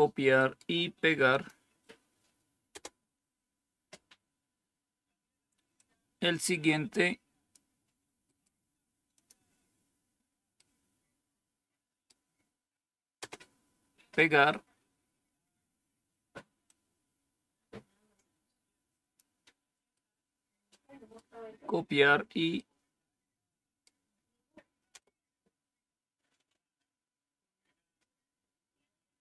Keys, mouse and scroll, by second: 1.3 click, 2.7 Return, 5.7-7.5 drag, 8.3 right click, 9.1 click, 13.1 Return, 15.1 scroll down 1, 16.6-19.1 drag, 19.9-24.9 right drag, 24.9 Return.